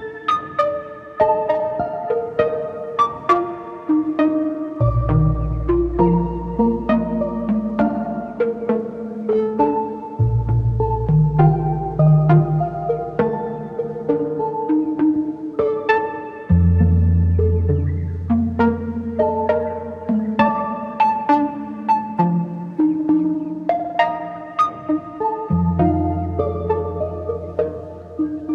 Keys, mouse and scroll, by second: 3.4 scroll down 2, 4.2 shift+middle click, 4.6 scroll down 1, 5.1 scroll up 1, 7.7-9.2 shift+drag, 17.5 Tab, 19.2 ctrl+s, 21.2 scroll down 2, 21.5-23.2 middle drag, 23.2-25.2 scroll up 1, 25.2 scroll up 1, 25.2 click, 25.2 scroll down 5, 26.2-26.7 scroll up 7, 26.7-28.0 middle drag, 28.0 click.